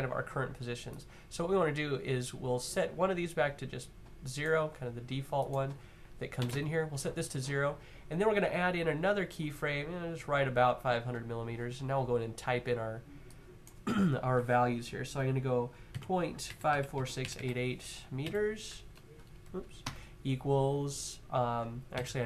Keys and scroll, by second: 6.1 0, 6.3 Tab, 15.7-18.0 typing, 19.1 typing, 19.6 Tab, 21.4-22.2 typing.